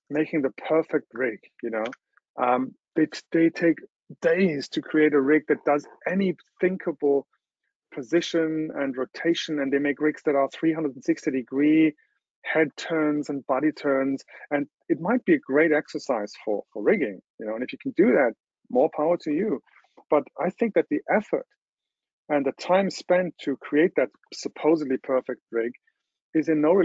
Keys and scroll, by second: 2.0 super+0.